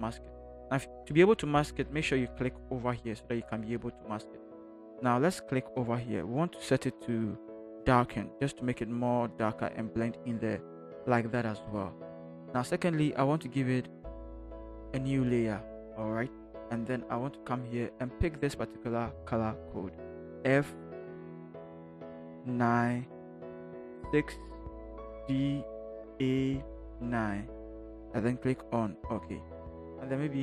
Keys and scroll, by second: 21.7 f, 26.0 a.